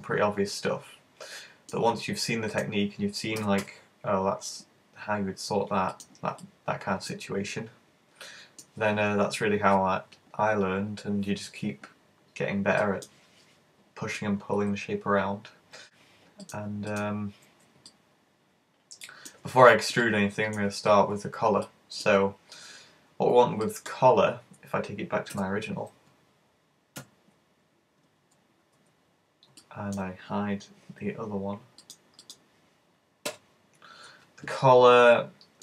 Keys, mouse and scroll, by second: 2.5 right click, 3.4 super+g, 6.1 click, 6.5 middle click, 7.5 middle click, 12.8 middle click, 14.2 middle click, 16.5 right click, 16.9 shift+right click, 17.9 middle click, 20.1 middle click, 21.7 middle click, 23.7 middle click, 24.0 scroll up 3, 24.5-25.4 alt+scroll down 2, 25.4-25.7 scroll down 3, 25.4 z, 26.0 z, 27.0 `, 27.7-28.3 scroll down 3, 28.3 z, 28.8 z, 29.2 scroll up 2, 29.6 shift+middle click, 31.9 click, 32.4 click, 33.3 h, 33.7-34.5 scroll up 4, 34.5 middle click.